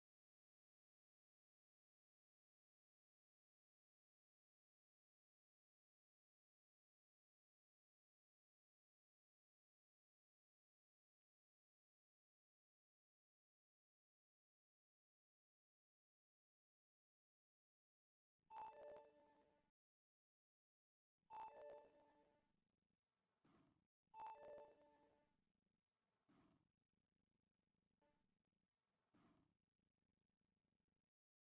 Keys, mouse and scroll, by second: 0.7 a, 1.5 click, 2.1 shift+click, 2.8 j, 3.3 a, 4.1 middle click, 5.4 click, 7.1 shift+click, 7.5 middle click, 8.6 shift+click, 11.1-12.3 shift+drag, 12.7 shift+click, 13.1 shift+click, 14.2 shift+click, 14.8 shift+click, 15.3 shift+click, 15.8 shift+click, 16.9 shift+click, 20.0-22.2 middle drag, 23.2 ctrl+x, 27.5 v, 28.4 right click, 29.4 shift+middle click, 29.6 shift+middle click, 30.2 z.